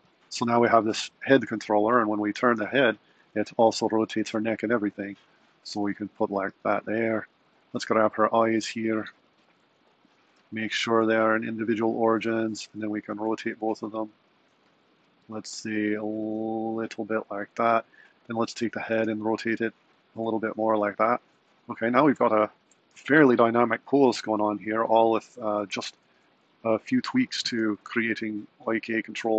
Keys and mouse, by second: 0.8 click, 1.6 r, 4.3 r, 5.7 r, 8.4 click, 9.6 shift+click, 12.7 r, 18.4 click, 19.0 r, 26.9 click, 28.0 r.